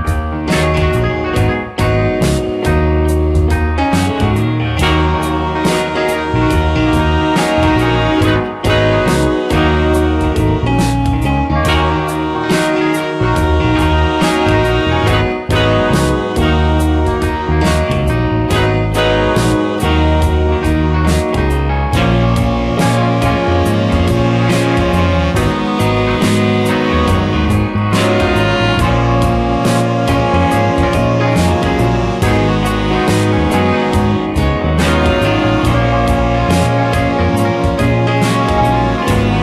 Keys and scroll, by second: 2.3 ctrl+z, 6.6 space, 9.7 space, 11.3 space, 16.1 space, 22.3 space, 23.4 space.